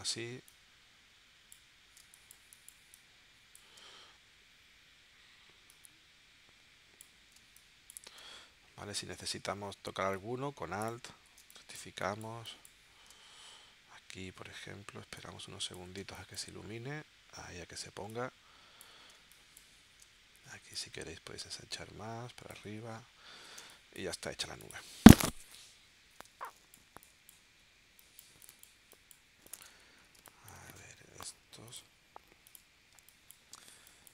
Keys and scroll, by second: 2.0 space, 7.3 space, 11.4 space, 16.0 space, 19.1 space, 23.6 space, 24.4 v, 26.2 space, 30.1 space, 32.9 space.